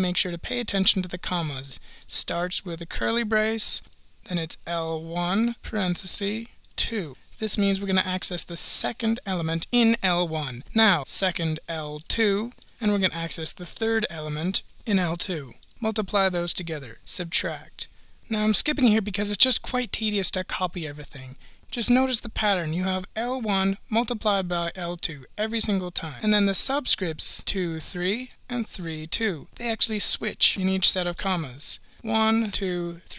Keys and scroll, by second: 3.1 (, 4.9 1, 5.5 (, 6.7 2, 7.1 ), 12.0 2, 12.6 (, 13.7 3, 15.7 ), 17.5 -.